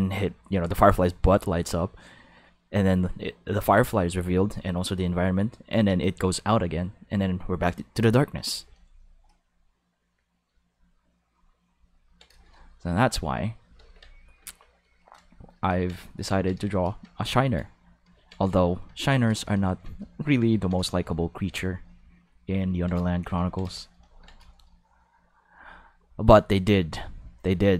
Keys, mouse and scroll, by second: 11.9 ctrl+middle click, 12.3 shift+middle click, 13.8 ctrl+s, 15.2 shift+middle click, 16.0 shift+middle click, 16.3 ctrl+middle click, 16.6 shift+middle click, 17.1 ctrl+middle click, 17.5 shift+middle click, 18.9 ctrl+middle click, 19.3 shift+middle click, 19.6 ctrl+middle click, 23.1 shift+middle click, 23.5 ctrl+middle click, 23.6 shift+middle click.